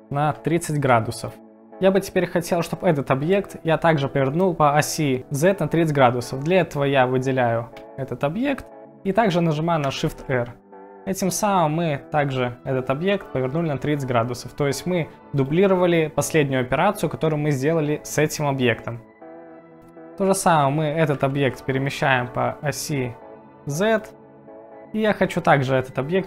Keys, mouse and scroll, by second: 0.4 g, 1.3 click, 7.7 click, 10.1 shift+r, 21.5 z, 24.0 click.